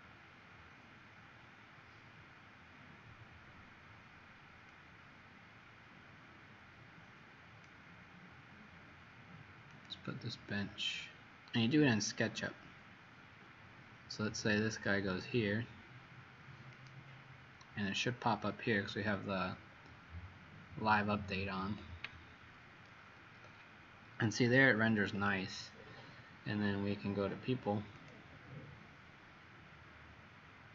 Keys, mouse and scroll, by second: 25.3 Escape, 28.0 click.